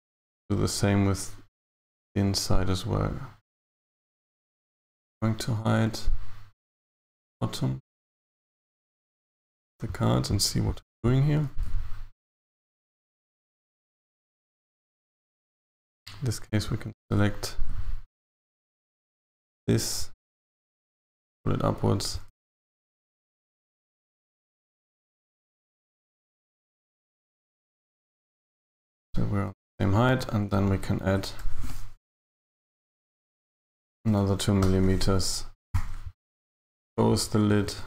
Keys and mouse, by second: 7.3 click, 7.9 click, 8.7 click, 15.4 a, 15.6 a, 16.8 alt+shift+right click, 20.5 g, 22.3 KP_1.